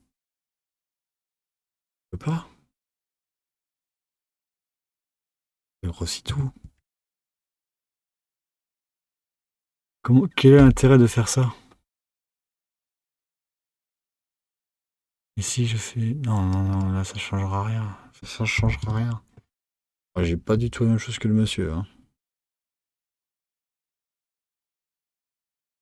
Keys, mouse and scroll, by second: 6.7 z, 15.4-19.7 drag, 22.6 click, 23.9 g.